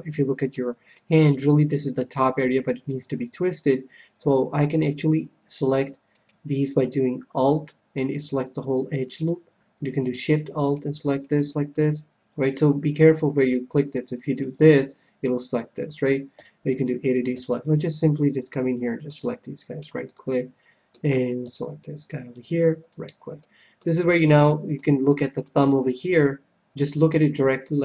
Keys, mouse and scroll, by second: 6.1-8.0 right drag, 9.0-13.2 right drag, 14.1-16.2 right drag, 16.3 a, 17.3 c, 19.6-21.4 right drag, 20.0-22.0 middle drag, 21.4 c, 23.1-24.6 right drag, 23.4-27.3 middle drag.